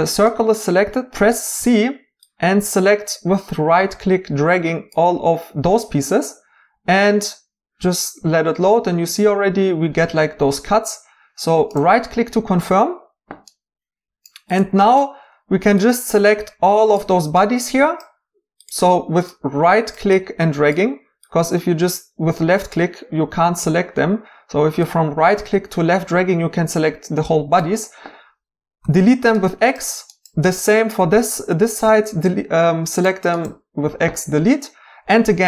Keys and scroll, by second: 1.6 c, 28.8 x, 31.8 x.